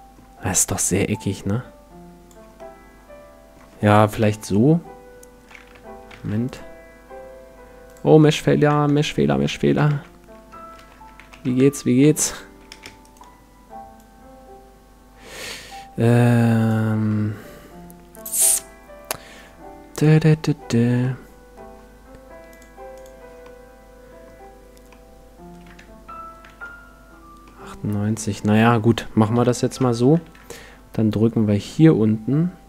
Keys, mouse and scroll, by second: 1.1-3.0 drag, 2.6-4.4 middle drag, 4.1 KP_1, 5.8 Tab, 6.1 ctrl+r, 7.9-9.9 drag, 8.2-9.5 middle drag, 8.7 Tab, 9.3 Tab, 9.6 a, 9.9 middle click, 9.9 a, 10.8 ctrl+n, 11.2 a, 11.4 Tab, 12.0 Tab, 13.0-14.8 right drag, 14.0-15.8 drag, 15.5 x, 17.1-18.9 middle drag, 19.9-21.6 drag, 21.0-22.8 middle drag, 22.5-24.6 drag, 23.4-27.6 middle drag, 26.4 Tab, 27.9 Tab, 29.3 KP_1, 29.8 Tab, 30.2 shift+a.